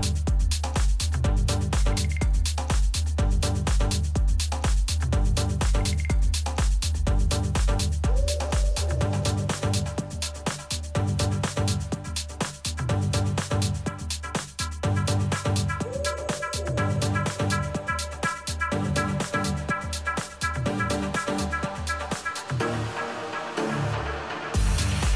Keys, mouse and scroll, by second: 1.5-3.0 middle drag, 3.0-8.8 right drag, 7.3-10.6 middle drag, 7.7 click, 10.6-12.6 drag, 11.6 middle click, 12.8 middle click, 13.5-15.5 drag, 15.8-18.4 middle drag, 18.4 a, 20.4 ctrl+r, 23.7-25.1 middle drag.